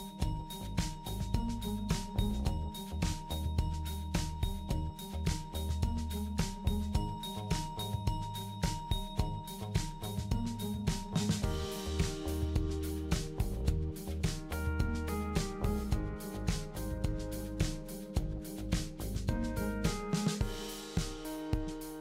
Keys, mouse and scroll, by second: 1.6 click, 2.8 click, 4.8 click, 7.3 click, 8.8 click.